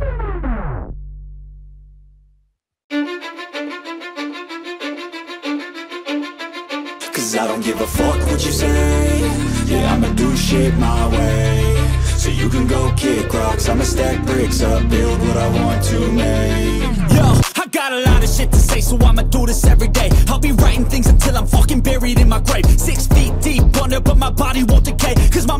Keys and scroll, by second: 3.8 Return, 9.4 Up, 9.6 Up, 9.7 Up, 9.9 Up, 10.2 Left, 10.3 Left, 10.5 Left, 10.6 Left, 10.8 Left, 11.2 Down, 11.4 Down, 16.0 ctrl+t, 25.3 Up, 25.5 Up.